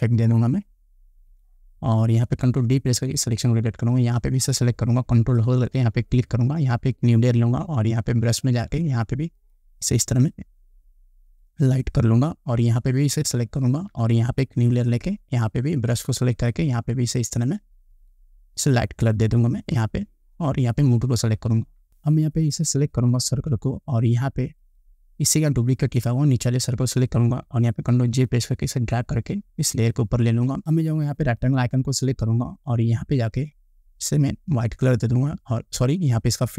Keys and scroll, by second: 3.2 ctrl+d, 28.2 ctrl+j.